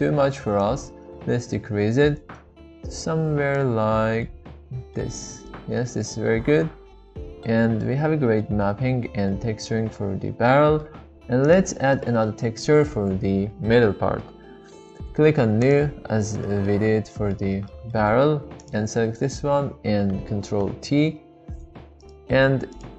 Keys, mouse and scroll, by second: 0.7-3.9 drag, 4.2-5.0 middle drag, 5.5-7.4 middle drag, 7.8-8.4 middle drag, 8.6-9.1 shift+middle drag, 9.3-10.8 middle drag, 11.9-12.2 shift+middle drag, 15.6-15.9 drag, 16.6 middle click, 17.2 middle click, 17.7 middle click, 18.0 middle drag, 20.5 ctrl+t, 21.2 g, 22.9 click.